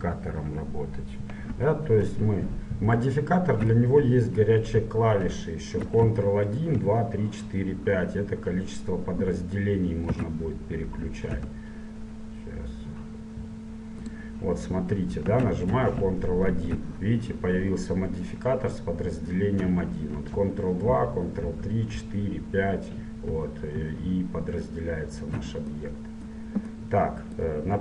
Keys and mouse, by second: 5.3 KP_7, 10.2 s, 15.2-18.3 middle drag, 15.4 z, 16.6 ctrl+1, 20.4 ctrl+2, 20.9 ctrl+3, 21.5 ctrl+4, 22.0 ctrl+5, 23.4 ctrl+4, 23.8 ctrl+3.